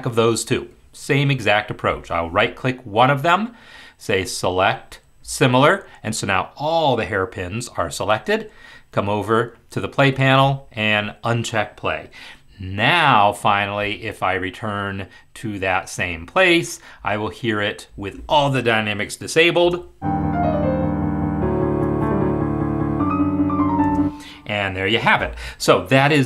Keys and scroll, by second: 19.6 space, 23.9 space.